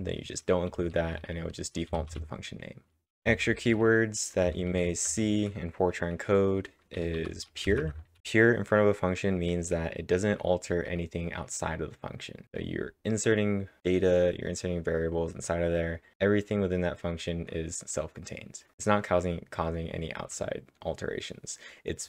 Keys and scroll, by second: 0.8-5.1 typing, 7.2-8.1 typing.